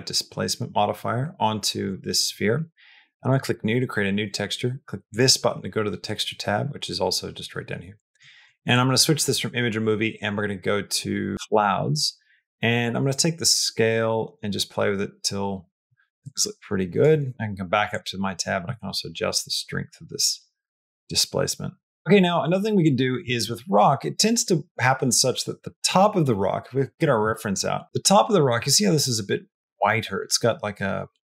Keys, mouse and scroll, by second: 3.1 click, 8.6-11.4 drag, 13.1-16.8 drag, 17.2 middle click, 18.7-22.0 drag.